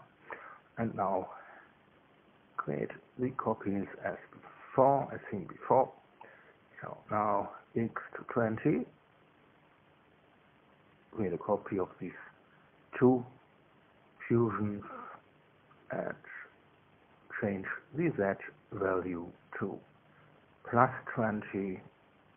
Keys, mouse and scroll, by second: 1.8 ctrl+c, 3.0 Return, 3.5 ctrl+v, 4.2-5.5 scroll up 2, 5.5-9.0 drag, 9.5 KP_2, 9.7 KP_0, 10.1 KP_Enter, 11.9 click, 12.4 shift+click, 13.3 ctrl+c, 14.4 Return, 15.3 ctrl+v, 16.5 click, 17.9 click, 21.1 click.